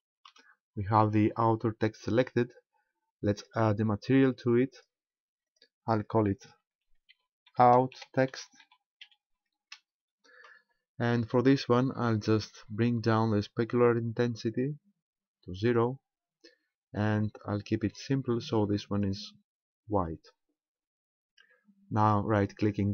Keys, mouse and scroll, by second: 0.6-0.9 scroll up 4, 3.4 click, 4.7 click, 5.5 click, 14.7 click, 18.1 click.